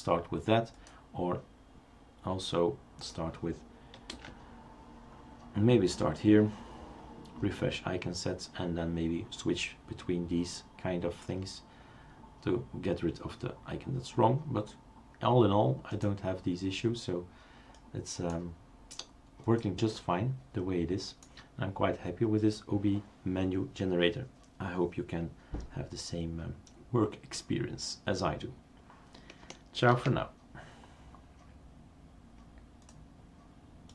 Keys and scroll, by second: 4.1 super+space.